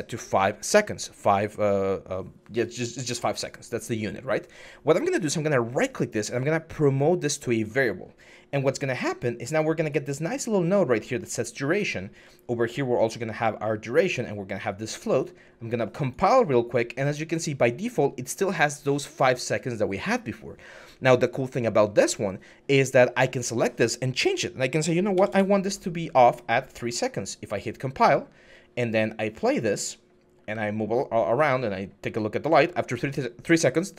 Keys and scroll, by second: 24.9 3, 25.1 Return, 30.3-31.1 w.